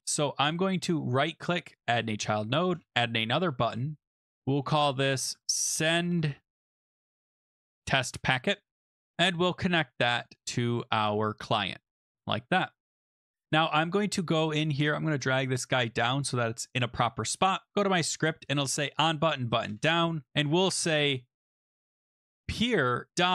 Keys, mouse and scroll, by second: 1.1 right click, 1.8 click, 2.7 Return, 4.2 click, 4.5 click, 5.1-8.2 typing, 9.1 click, 10.2 click, 10.4 click, 11.9 click, 11.9 Return, 13.5 click, 16.0 click, 17.7 click, 18.5 click, 19.7 Return, 22.0-23.3 typing.